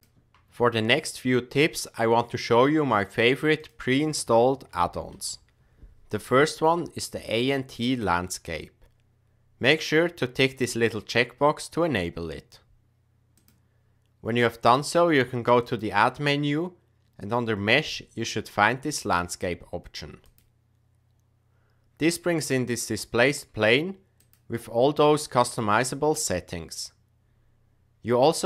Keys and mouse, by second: 13.3 click, 15.6-20.5 drag.